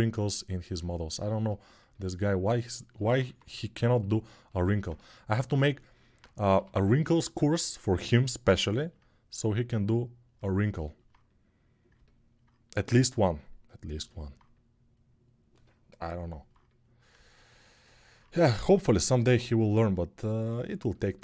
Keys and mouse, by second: 3.0 1, 6.3 g, 7.0-14.1 alt+drag, 18.3 1.